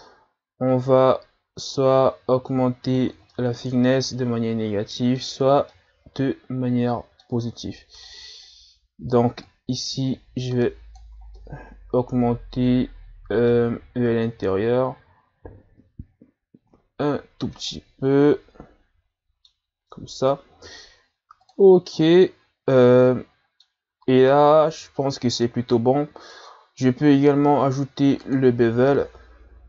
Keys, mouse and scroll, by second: 3.3-7.5 middle drag, 7.5-7.8 scroll down 4, 7.8-9.5 middle drag, 9.5-11.4 shift+drag, 11.4-14.3 middle drag, 14.3-17.3 drag, 17.8-19.7 middle drag, 19.7-20.8 scroll up 1, 20.8-21.4 scroll up 1, 21.4-22.0 drag, 22.0-25.0 middle drag, 26.3-29.4 drag.